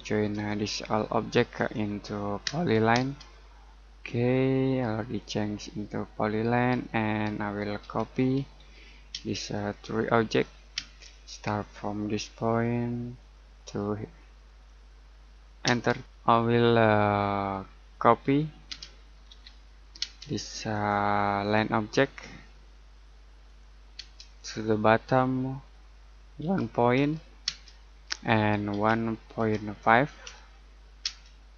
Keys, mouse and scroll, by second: 0.3 click, 2.9 space, 6.7-7.4 scroll up 1, 7.4 middle click, 7.8 c, 9.1 space, 9.5 click, 10.7 space, 11.0-11.4 scroll up 1, 13.1 click, 15.6 space, 16.1-16.7 scroll down 1, 16.7 middle click, 18.7-20.0 typing, 20.7 click, 23.9 space, 24.3 click, 26.4 typing, 27.4 space, 28.7 typing, 30.0-31.0 typing.